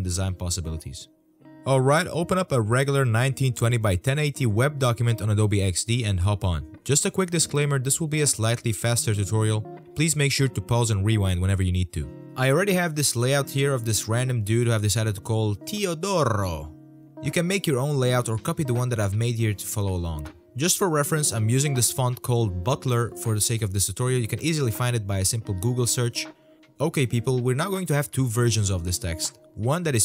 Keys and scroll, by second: 10.3 alt+c.